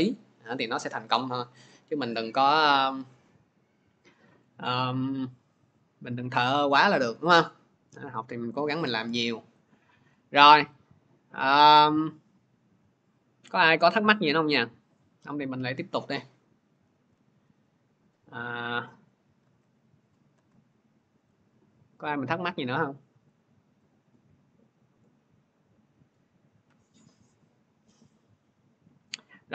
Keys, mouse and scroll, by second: 16.8 alt+Tab, 19.3 alt+Tab, 20.2 alt+Tab, 23.7 click.